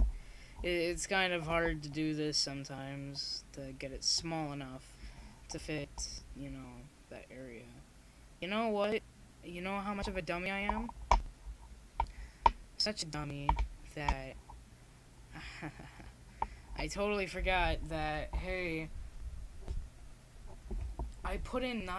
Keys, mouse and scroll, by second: 6.0-15.7 middle drag.